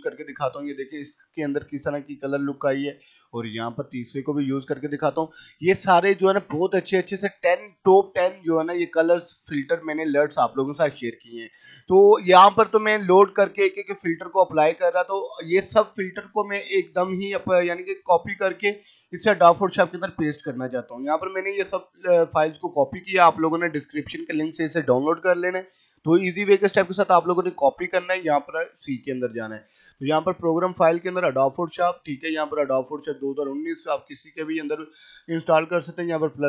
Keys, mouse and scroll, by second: 6.6 click, 12.2-18.9 drag, 18.9 right click, 21.2 click, 25.4 right click, 27.0 click, 35.9 click.